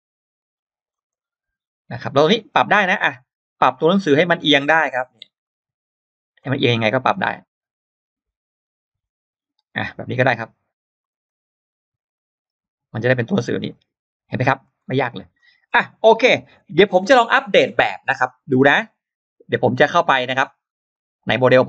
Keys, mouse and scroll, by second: 0.9 click, 2.0 click, 6.2 click, 6.9 click, 10.8 click, 11.1 click, 11.5-13.5 drag, 13.7 click, 14.6 scroll down 2, 15.2 scroll up 1, 20.7 click.